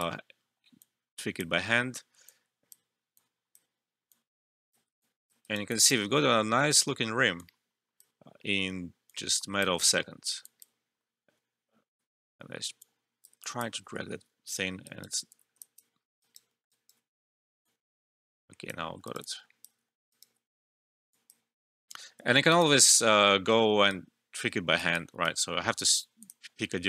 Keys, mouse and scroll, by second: 5.4 alt+right click, 5.6 alt+click, 6.1 alt+middle click, 7.3-10.4 drag, 11.9 ctrl+z, 12.7 click, 14.8 alt+right click, 15.3 ctrl+z, 15.6 alt+click, 15.9 alt+middle click, 16.2 alt+right click, 16.4 alt+middle click, 16.6 alt+right click, 17.6-19.0 drag, 19.0 alt+right click, 19.2 alt+click, 19.8 alt+middle click, 20.1 alt+right click, 20.6 Return, 21.1 alt+click, 21.8 alt+F12, 22.4 alt+right click, 26.2 click.